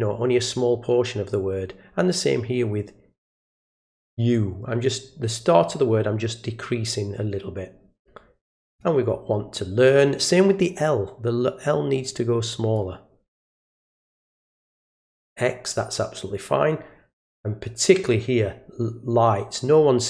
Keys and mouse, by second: 1.3-4.3 drag, 6.9-8.8 drag, 10.9-12.7 drag, 13.4 click, 17.4-18.1 drag.